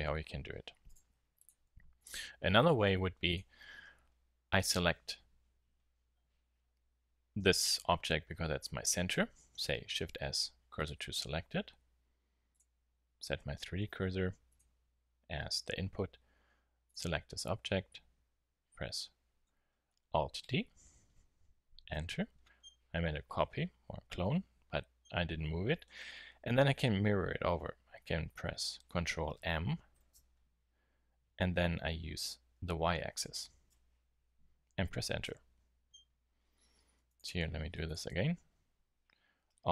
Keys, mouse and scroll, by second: 1.0-1.4 drag, 1.4-2.6 right drag, 1.7 x, 9.6 shift+s, 20.7 alt+d, 29.9 ctrl+m, 37.0 x, 37.9-39.7 right drag.